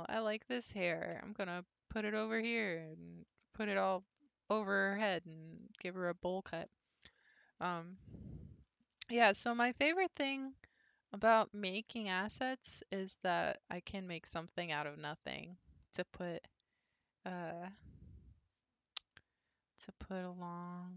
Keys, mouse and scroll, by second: 1.2 g, 3.3-5.2 middle drag, 5.2 scroll up 1, 5.3-6.4 middle drag, 6.4-6.9 scroll down 3, 6.9-8.0 shift+middle drag, 8.0 Tab, 8.8-10.3 shift+middle drag, 10.3-11.1 scroll down 5, 11.2-12.9 shift+middle drag, 12.9 click, 14.1 Tab, 14.5-14.9 scroll up 1, 15.1-18.1 shift+middle drag.